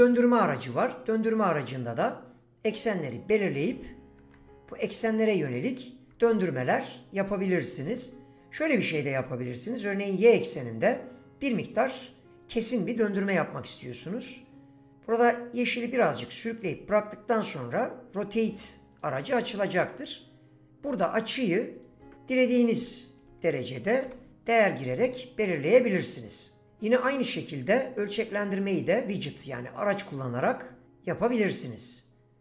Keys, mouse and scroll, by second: 2.6 click, 4.2 ctrl+z, 5.2 click, 6.1 ctrl+z, 7.8 ctrl+z, 18.9 click, 21.7-24.0 drag, 27.3 click, 29.5 click.